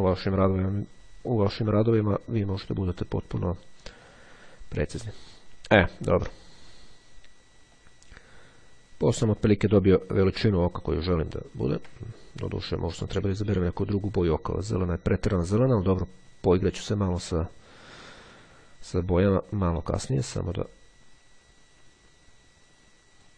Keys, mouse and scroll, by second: 4.0-5.1 drag, 7.9-9.7 drag, 9.8-10.4 ctrl+scroll down 2, 10.7-11.2 ctrl+scroll down 2, 12.2 ctrl+shift+click, 15.4-16.0 ctrl+scroll up 2, 20.6-23.3 drag.